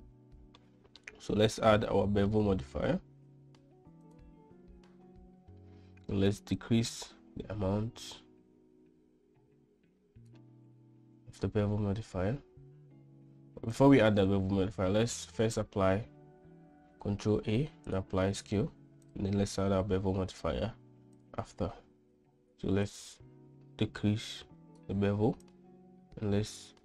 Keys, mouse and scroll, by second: 2.0-4.5 drag, 6.9-10.7 shift+drag, 14.1 click, 15.1 Tab, 16.1 Tab, 17.5 ctrl+a, 20.5-21.7 drag, 23.2-25.2 shift+drag, 25.8-26.8 drag.